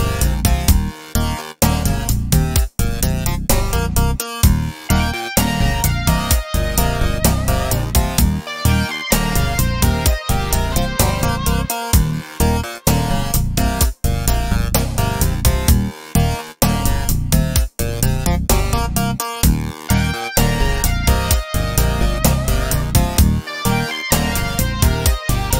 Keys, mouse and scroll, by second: 0.2 click, 1.1-2.0 scroll down 2, 2.0-2.5 scroll down 1, 2.5 click, 3.4-4.2 scroll down 2, 4.2 click, 5.6 click, 9.8-19.2 drag, 11.4-13.4 scroll up 2, 19.8-20.1 scroll down 2, 20.1-21.6 middle drag, 21.6 click, 22.3 Tab, 23.1-23.5 scroll up 1, 23.5-25.5 middle drag, 25.3 scroll down 1.